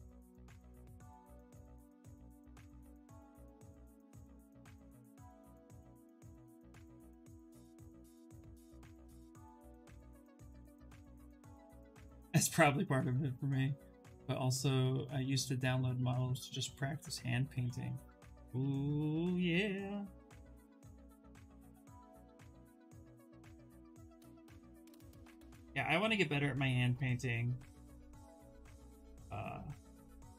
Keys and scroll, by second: 4.3 ctrl+z, 7.4 ctrl+z, 7.6 ctrl+z, 8.2 ctrl+z, 9.1 ctrl+z.